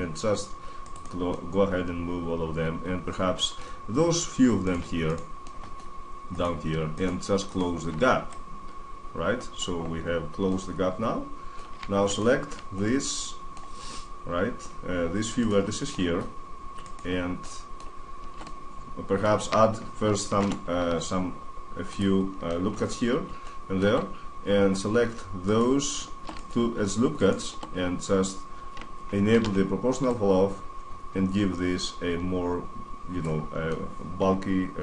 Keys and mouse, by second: 1.1-2.9 middle drag, 3.5-4.9 middle drag, 4.9 right click, 5.3 middle click, 5.4-8.1 right drag, 9.3 drag, 9.5-10.1 middle drag, 10.4-11.8 middle drag, 12.7 right click, 13.0 middle click, 13.1 right click, 13.2 middle click, 13.5 middle click, 15.1-17.2 middle drag, 18.3-19.4 middle drag, 20.1 ctrl+r, 23.8-24.8 middle drag, 25.2-28.5 drag, 28.6 middle click, 29.1 alt+o, 29.9 click, 33.1 middle click, 33.8-34.8 middle drag.